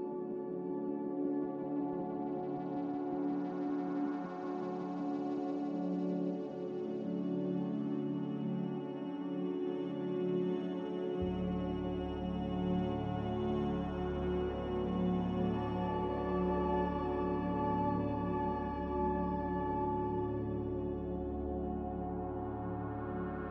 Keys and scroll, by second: 5.3 r, 9.4 a, 14.5 ctrl+c, 17.8 ctrl+v, 21.6 ctrl+c.